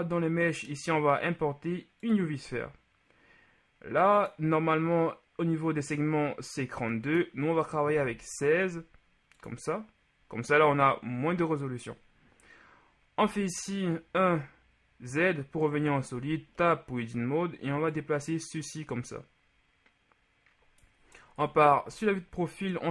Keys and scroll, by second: 8.0 KP_1, 8.2 KP_6, 13.3 z, 16.2 Tab, 21.5 KP_3.